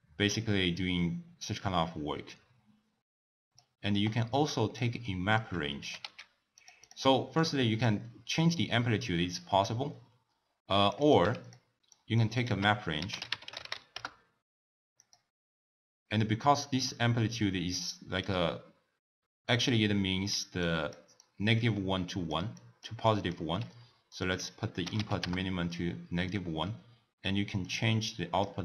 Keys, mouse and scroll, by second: 4.3 click, 5.1 middle click, 5.8 g, 6.9 click, 7.4 click, 8.8-11.5 drag, 11.9 click, 12.4 ctrl+a, 18.4-23.6 typing, 20.6 click, 21.3 click, 22.1 click, 22.6 click, 23.1 click, 24.1-27.1 drag, 27.7 click.